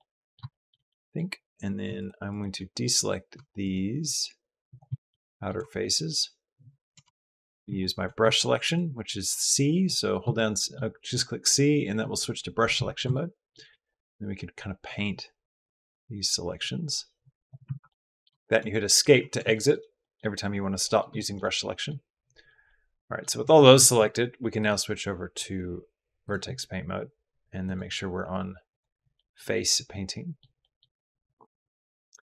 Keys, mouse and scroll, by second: 0.3 shift+click, 0.7 click, 1.8 shift+click, 2.1 shift+click, 2.6 middle click, 4.9 middle click, 5.6 shift+middle click, 6.9 shift+click, 7.4 c, 7.4 Escape, 7.6 click, 8.3 c, 12.5 Escape, 12.9 shift+click, 13.5 c, 17.4 Escape, 17.7 middle click, 18.2 shift+click, 19.3 shift+click, 20.6 click, 21.0 shift+click, 21.3 click, 21.7 click, 22.5 middle click, 24.5-26.1 middle drag, 27.4 middle click, 28.5 middle click, 29.0 middle click, 29.7 middle click, 30.4 middle click, 31.0 click.